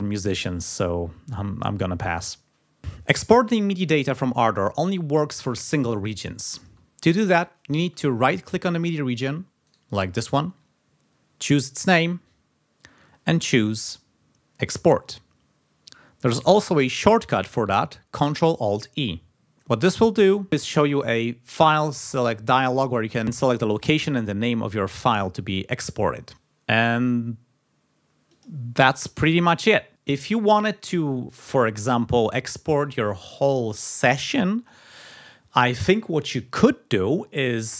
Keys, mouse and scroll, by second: 4.8 space, 6.7 space, 7.8 space, 9.4 g, 9.6 right click, 19.5 click, 28.3 click.